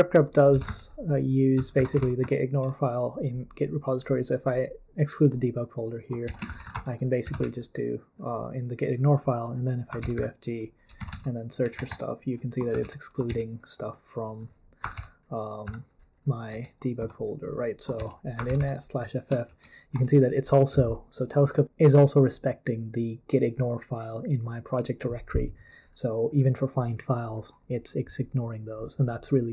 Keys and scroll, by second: 0.3-2.5 typing, 2.6 Return, 6.2-7.7 typing, 9.6-19.5 typing.